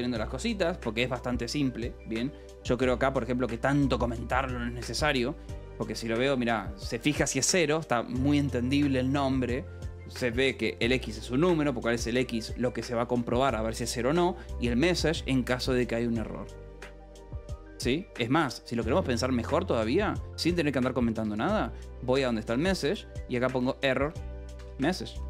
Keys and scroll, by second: 2.4-4.2 typing, 6.1 shift+k, 17.2-19.9 typing, 20.9-24.8 typing, 24.8 Escape.